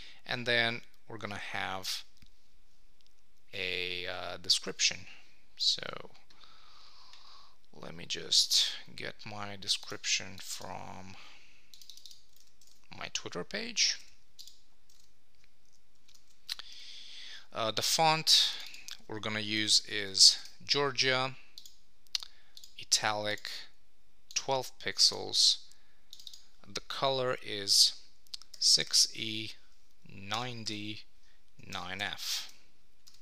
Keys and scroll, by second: 4.7 super+Tab, 7.1 super+[, 12.7 super+Tab, 14.9 super+v, 16.1 super+Return, 20.4 Return, 32.4 Return.